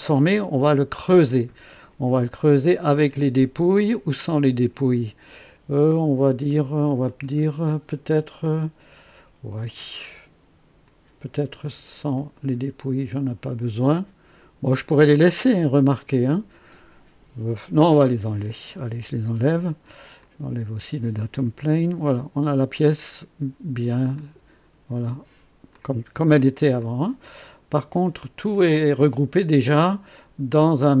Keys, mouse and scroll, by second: 6.4 click, 7.0-7.3 scroll down 1, 7.3-8.5 middle drag, 10.8 click, 12.1 click, 12.6 scroll down 1, 17.9 shift+click, 19.0 Delete, 20.2 click, 21.4 Delete, 22.0-23.6 drag, 24.1 click, 25.7-26.7 drag, 26.8 click, 28.5 click.